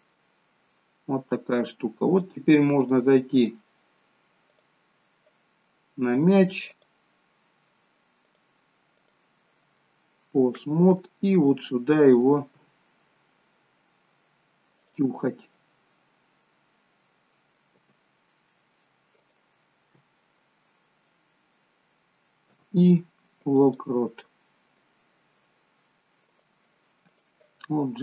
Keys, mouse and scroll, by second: 0.3 middle click, 3.0 click, 4.5 click, 5.9 middle click, 6.8 click, 8.2 click, 9.9 middle click, 12.6 g, 15.4 middle click, 17.3 middle click, 17.9 g, 26.4 click.